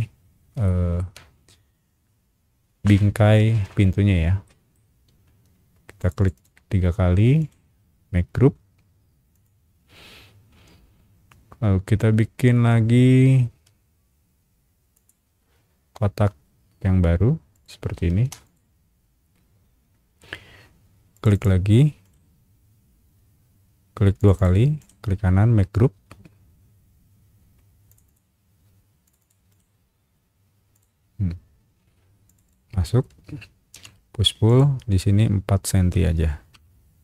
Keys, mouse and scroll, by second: 0.6 shift+middle click, 1.0 shift+scroll up 1, 4.4 shift+middle click, 5.2 space, 6.0 click, 6.2 click, 6.3 click, 7.4 right click, 9.3 click, 10.6 scroll up 1, 11.5-12.3 scroll up 2, 12.4-13.3 scroll down 3, 12.7 middle click, 13.1 middle click, 13.6 r, 14.9 click, 17.5 click, 18.0 space, 18.4 click, 21.1 click, 21.3 click, 22.0 right click, 24.2 click, 24.3 click, 24.8 right click, 27.9 click, 28.0 click, 29.0 click, 29.2 click, 29.5 right click, 30.7 click, 32.2 click, 32.4 click, 33.7 p, 34.4 click, 35.9 KP_4, 36.5 KP_Enter.